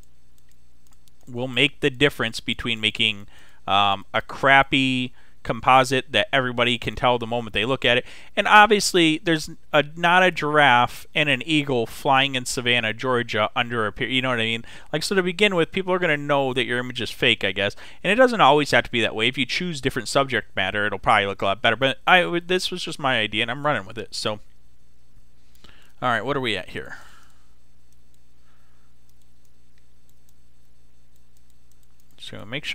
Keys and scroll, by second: 10.1 x, 30.3 x.